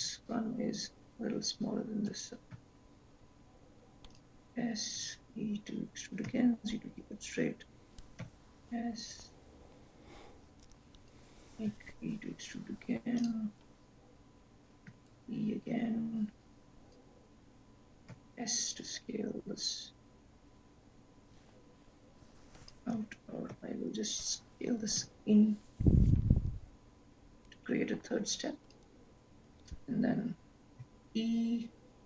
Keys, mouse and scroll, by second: 0.0 ctrl+z, 2.7 s, 5.0 e, 8.4 s, 11.8 e, 14.9 e, 18.1 s, 23.3 ctrl+z, 23.6 ctrl+z, 25.1 s, 29.7 e.